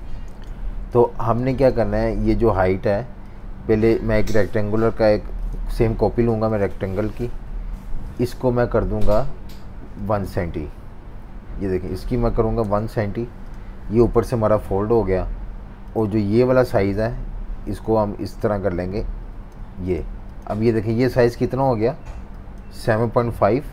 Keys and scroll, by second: 0.3 z, 1.0 v, 1.2 space, 12.1 1, 12.6 Return.